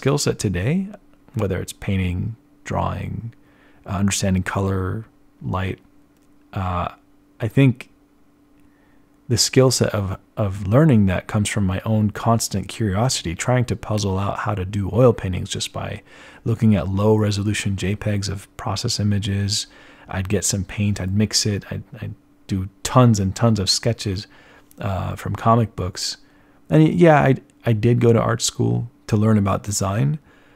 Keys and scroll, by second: 23.8 z, 24.7 b.